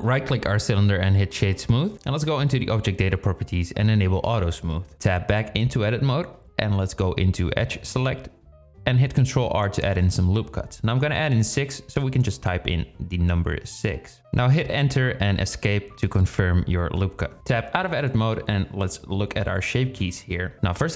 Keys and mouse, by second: 2.7 click, 3.8 click, 4.4 click, 4.9 Tab, 6.1 click, 8.3 ctrl+r, 13.5 shift+drag, 16.5 Tab.